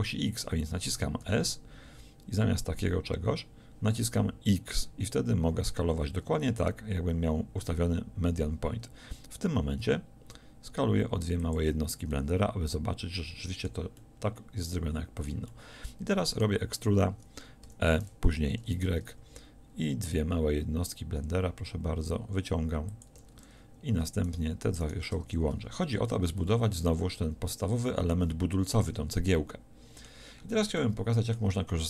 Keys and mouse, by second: 1.3 s, 17.7 e, 23.0-25.3 drag, 25.3 f, 25.6 a.